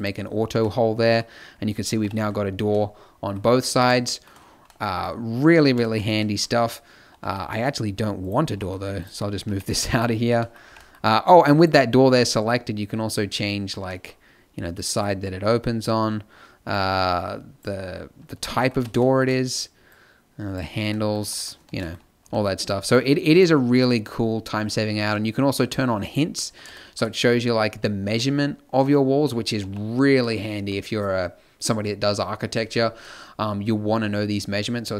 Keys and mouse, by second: 0.4 a, 2.0 KP_5, 7.2 z, 9.4 b, 10.6 b, 12.1 n, 18.7 z, 21.1 z, 22.2 b, 23.2 x, 25.5-28.1 drag, 28.8 middle click, 29.6 n.